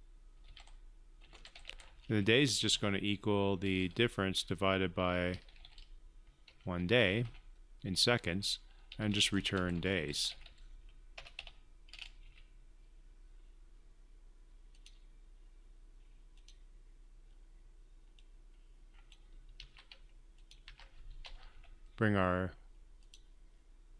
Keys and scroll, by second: 20.4 ctrl+c, 21.4 ctrl+v.